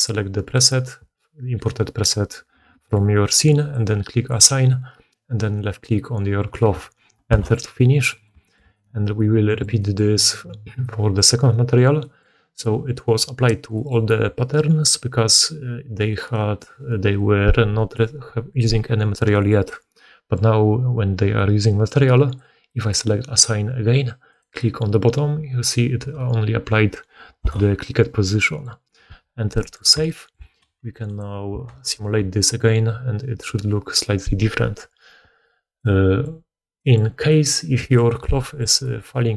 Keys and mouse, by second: 0.0-3.6 middle drag, 3.6-11.2 drag, 11.2-22.3 middle drag, 22.3-39.3 drag, 31.6 shift+space.